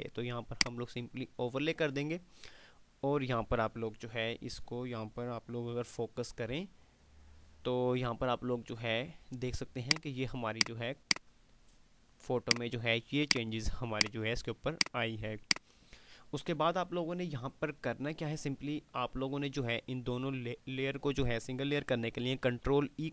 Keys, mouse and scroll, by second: 0.5 click, 1.0-1.7 typing, 3.5 typing, 5.9 F5, 5.9 typing, 9.4 F5, 9.7 click, 9.7 typing, 21.7 click, 22.5 ctrl+e.